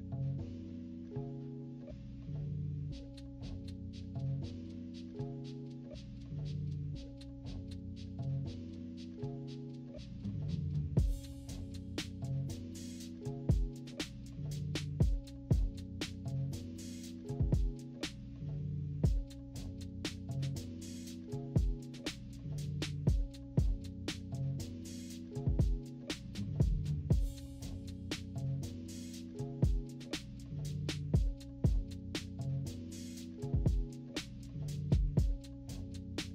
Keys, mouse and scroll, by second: 0.1 click, 0.5 -, 0.6 -, 0.8 =, 1.5 click, 3.1 click, 3.4 click, 3.7 click, 4.2 click, 4.3 click, 5.3 click, 6.0 click, 7.3 click, 7.5 click, 7.9 click, 8.3 click, 8.5 click, 8.6 click, 8.9 click, 9.3 click, 9.9 click, 10.7 click, 10.9 click, 11.0 click, 11.1 click, 11.4 click, 11.9 click, 12.5 click, 13.0 click, 14.3 click, 14.7 click, 15.4 click, 15.8 click, 16.7 click, 17.3-18.4 typing, 18.0-18.4 scroll down 3, 18.5 scroll up 1, 18.9 click, 21.2 click, 22.2 click, 22.6 click, 23.0 -, 23.1 -, 23.4 -, 23.5 =, 24.1 click, 25.5 click, 27.8 -, 28.1 =, 28.5-29.1 scroll up 6, 28.6 =, 29.1-29.5 scroll down 4, 29.5 =, 30.2 click, 31.5 click, 32.2 click, 32.7 -, 33.1 scroll up 1, 33.1 =, 33.3 scroll down 1, 33.3 =, 33.8 click, 35.2 click, 35.6 click.